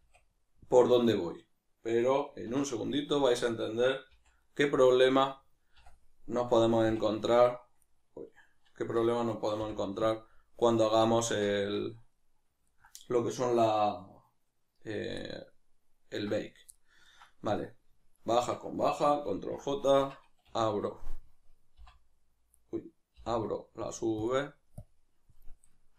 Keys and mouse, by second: 2.0-3.2 middle drag, 2.4 2, 3.2 alt+right click, 4.2 v, 4.5 right click, 4.9-8.8 middle drag, 5.8 a, 8.8 a, 11.0-18.1 ctrl+middle drag, 11.5 Tab, 18.1 shift+right click, 19.4 ctrl+j, 25.7-25.9 ctrl+middle drag.